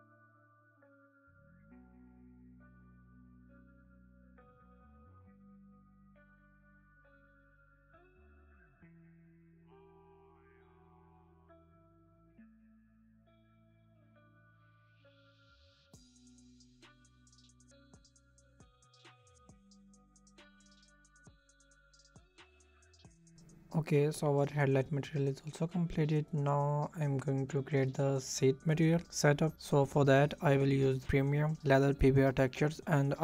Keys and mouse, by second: 3.3 Tab, 4.4 click, 4.5 middle click, 5.9 alt+click, 7.3 ctrl+KP_Add, 8.3 drag, 9.5 Tab, 10.3 middle click, 11.7 middle click, 12.1-13.3 middle drag, 13.3 click, 16.3 middle click, 19.0 click, 19.2 middle click, 20.1 ctrl+KP_Add, 22.5 Tab, 23.7 KP_0, 24.2 middle click, 24.6 shift+middle click, 25.0 shift+middle click, 25.5 shift+middle click, 25.9 shift+middle click, 26.3 shift+middle click, 27.1 shift+middle click, 27.2 shift+click, 27.5 click, 29.8 click.